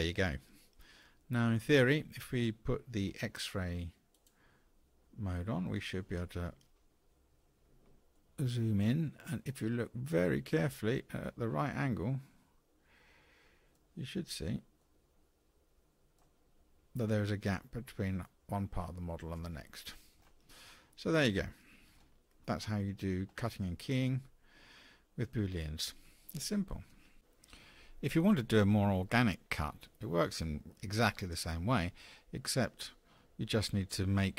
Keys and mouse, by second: 0.3-1.0 middle drag, 4.2 click, 8.1-11.3 middle drag, 11.7-13.7 middle drag, 14.8-16.2 middle drag, 20.8-21.9 middle drag.